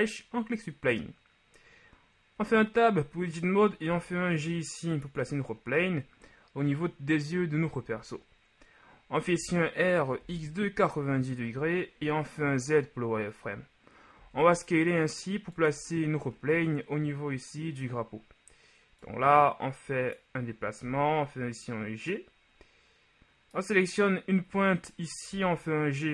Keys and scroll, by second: 2.5 Tab, 3.9 g, 9.4 r, 10.2 x, 10.4 KP_9, 10.7 KP_0, 11.0 Return, 12.1 z, 14.2 s, 20.9 g, 25.5 g.